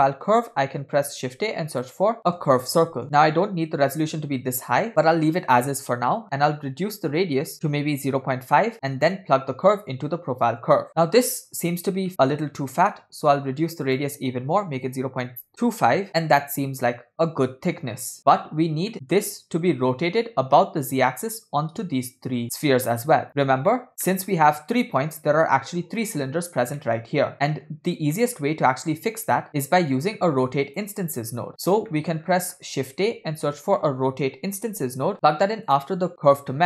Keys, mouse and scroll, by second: 1.2 shift+a, 5.8-8.1 drag, 9.2-10.9 drag, 10.9-12.1 middle drag, 12.7 middle click, 13.5-13.9 scroll up 2, 13.9-16.0 drag, 18.9 middle click, 19.7-20.4 scroll down 1, 23.4-23.7 scroll down 3, 23.7 middle click, 24.1 middle click, 24.6-25.2 scroll up 2, 26.8 middle drag, 27.3-27.7 middle drag, 28.2 middle click, 29.1 click, 29.5 middle click, 29.5-30.0 scroll down 7, 30.0-30.9 drag, 31.4 click, 31.9 middle click, 32.2-32.9 scroll up 5, 33.2 shift+a, 36.5 middle click.